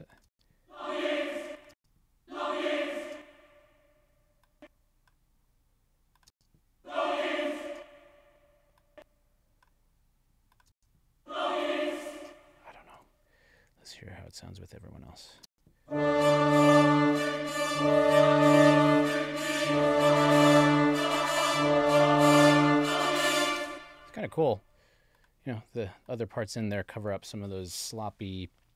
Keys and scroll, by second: 0.3 space, 3.1 space, 6.3 space, 7.7 space, 10.7 space, 12.2 space, 15.4 space, 23.6 space.